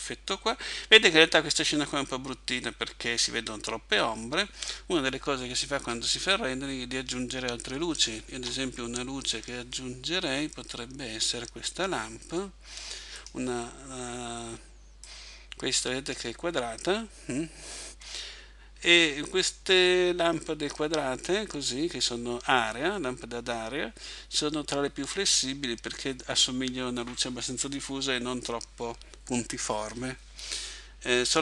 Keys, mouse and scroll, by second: 5.8 Escape, 8.3 shift+a, 15.0 click.